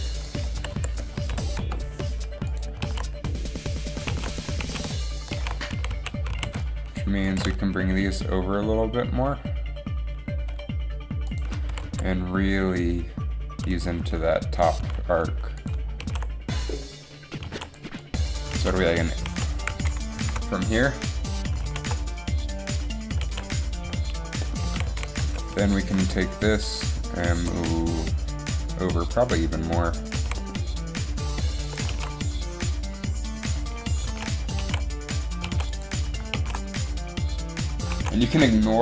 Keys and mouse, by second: 0.8 a, 0.8 b, 0.8 s, 2.6 click, 3.0 alt+a, 4.3 alt+a, 4.4 alt+a, 4.7 alt+a, 5.7 alt+a, 6.5 a, 6.7 b, 7.3 g, 11.9 s, 15.7 a, 17.7 alt+a, 18.6 alt+a, 19.6 alt+a, 20.4 shift+Left, 21.7 alt+a, 23.4 alt+a, 25.0 a, 25.2 a, 25.4 b, 25.9 g, 27.3 g, 30.3 a, 31.8 a, 34.3 alt+a, 34.7 alt+a, 35.8 alt+a, 36.4 alt+a, 38.1 alt+a.